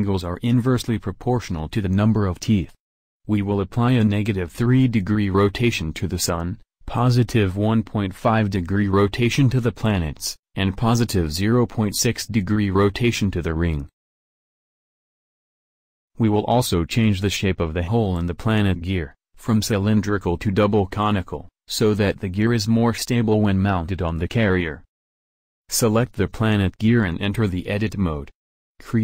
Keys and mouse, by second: 0.2 r, 5.5 Tab, 6.2 Tab, 7.1 ctrl+r, 7.5 click, 8.9 shift+c, 10.3 r, 15.5 Tab, 17.7 Tab, 18.9 middle click, 19.3 ctrl+r, 19.3 a.